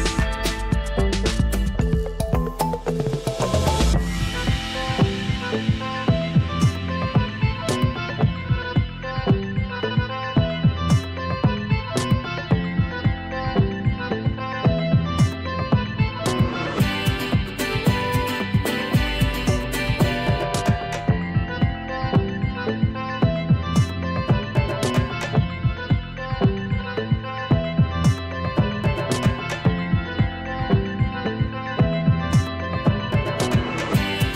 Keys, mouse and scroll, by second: 4.6 scroll down 1, 5.0 scroll up 1, 6.7-7.9 drag, 20.1 space, 20.3 click, 20.5 click, 20.6-20.9 space, 21.6-22.5 drag.